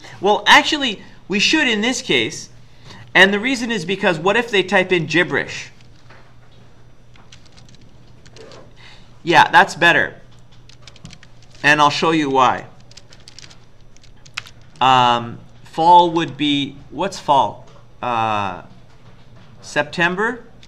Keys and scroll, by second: 4.5 BackSpace, 4.7 BackSpace, 5.1 BackSpace, 5.2 BackSpace, 7.2-9.3 typing, 10.5-14.4 typing, 16.0 typing.